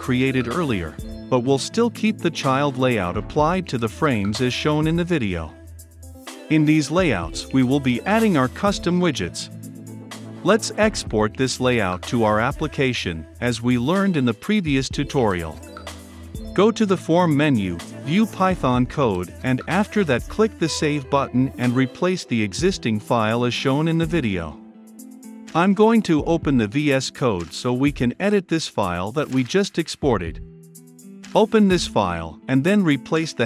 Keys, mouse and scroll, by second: 1.9 click, 4.4 l, 4.6 i, 4.8 n, 4.9 e, 5.7-33.4 drag.